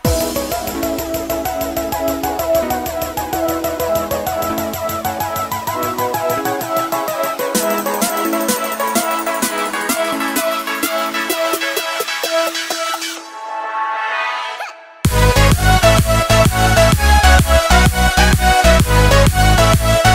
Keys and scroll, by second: 6.0 ctrl+g.